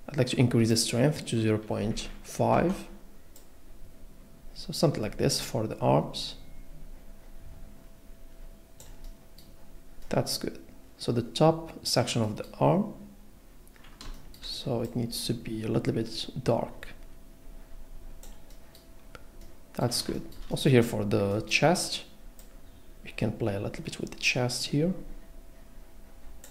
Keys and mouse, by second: 0.8-2.1 drag, 2.1 middle click, 3.4 middle click, 22.4 click.